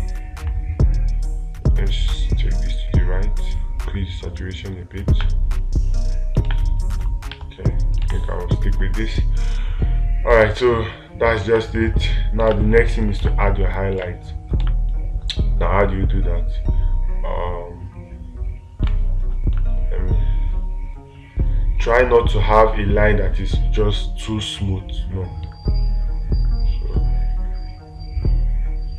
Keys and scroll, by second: 6.9 space, 7.8 ctrl+z, 12.9 space, 19.3 space.